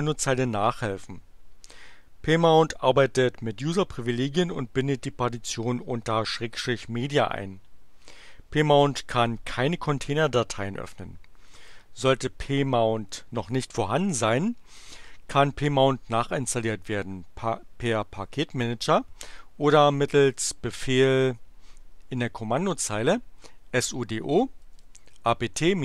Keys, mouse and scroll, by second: 11.5 click, 19.8-20.9 typing, 24.6-25.8 typing.